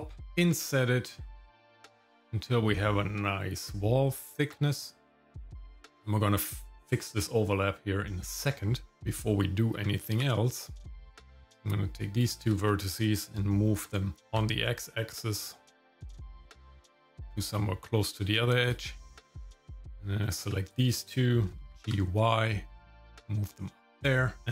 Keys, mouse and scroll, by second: 0.3 i, 9.1 Tab, 11.2 click, 13.9 g, 19.7 click, 20.7 shift+click, 21.7 g, 24.4-24.5 scroll down 1.